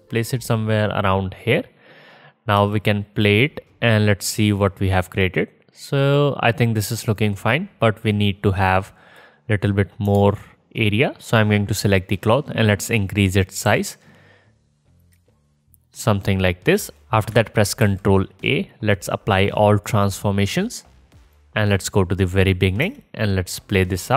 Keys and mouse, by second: 2.6 space, 5.3-6.6 middle drag, 6.9 space, 10.1 KP_0, 10.3-11.4 middle drag, 11.4 click, 13.7 s, 17.8 ctrl+a, 21.4-22.5 drag, 22.9 space, 24.0 click.